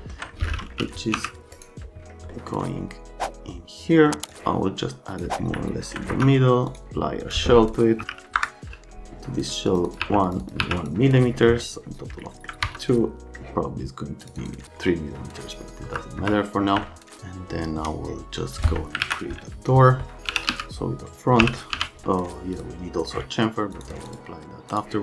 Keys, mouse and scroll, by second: 0.5 middle click, 0.7 e, 1.1 z, 1.5 right click, 2.3 middle click, 4.3 click, 5.6 alt+middle click, 6.1 F2, 7.7-8.6 typing, 9.6 Pause, 12.6 F3, 14.2 click, 14.4 middle click, 16.2 F3, 16.8 alt+middle click, 18.6 click, 19.0 alt+q, 20.2 f, 20.5 z, 21.4 l, 21.7 z, 22.5 click, 23.7 click, 24.0 click, 24.7 click.